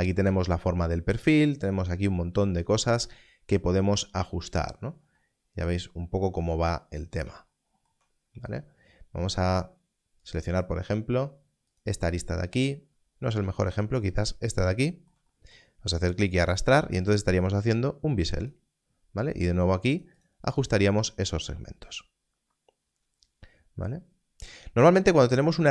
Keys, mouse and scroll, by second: 10.7 click, 13.3 alt+a, 14.4 click.